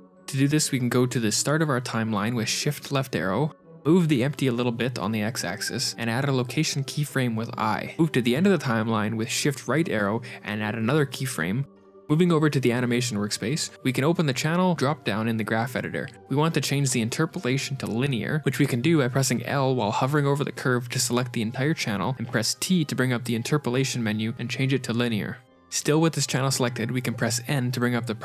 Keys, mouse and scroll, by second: 1.2 click, 2.2 click, 3.6 shift+Left, 3.8 middle click, 3.8 KP_Decimal, 3.8 KP_1, 4.5 r, 6.0 g, 7.6 i, 10.0 shift+Right, 10.5 g, 11.6 i, 13.8 click, 15.1 click, 17.0 click, 18.5-19.0 scroll down 3, 18.5 a, 18.5 l, 19.0 click, 19.3 l, 22.0 t.